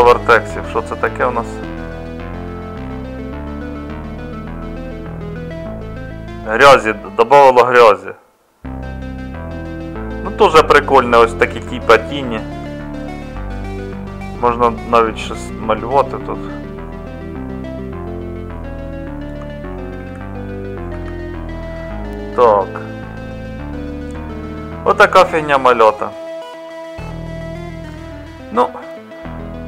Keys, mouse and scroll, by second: 20.0 ctrl+z.